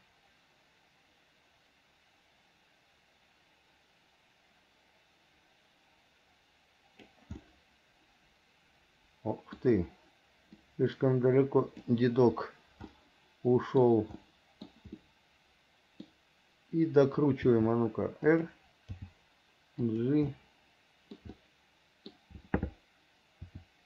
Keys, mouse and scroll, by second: 7.6 middle click, 10.9-12.1 drag, 13.2 scroll up 1, 13.3 middle click, 14.4 middle click, 15.2 scroll up 1, 15.3 middle click, 17.6 r, 19.2 g, 20.5 middle click, 21.5 scroll up 1, 21.6 middle click, 23.7 r.